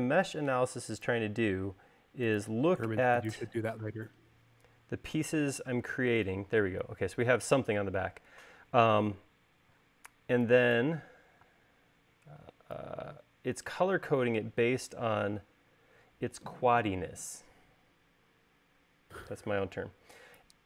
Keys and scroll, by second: 4.5 space, 10.3 e, 12.1 space, 13.2 e.